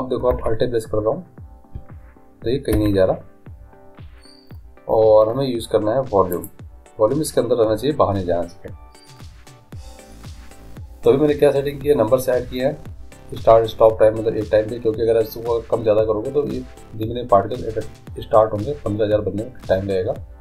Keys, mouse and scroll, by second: 0.3 alt+a, 2.8 Escape, 6.3 middle click, 6.4-8.3 drag, 10.5-20.4 scroll up 1.